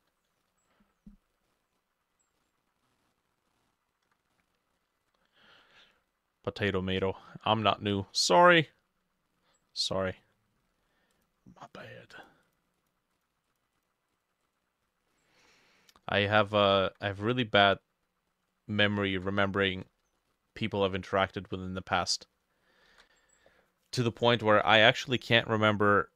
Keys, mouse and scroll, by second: 0.7 scroll up 1, 1.1-1.5 scroll down 1, 1.5 middle click, 1.8 scroll up 1, 2.9 middle click, 3.3-4.4 ctrl+middle drag, 4.9 ctrl+middle click, 5.0 ctrl+s, 9.9 middle click, 15.1 middle click, 16.6 ctrl+middle click, 17.1 middle click, 18.9 ctrl+middle click, 19.2 ctrl+s, 20.2 middle click, 22.0 middle click, 22.9 ctrl+middle click, 22.9 ctrl+s.